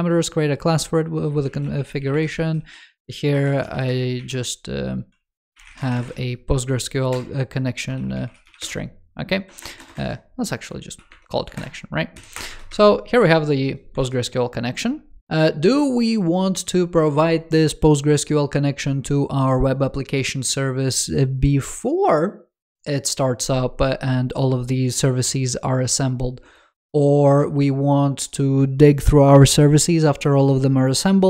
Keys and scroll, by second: 13.8 super+c.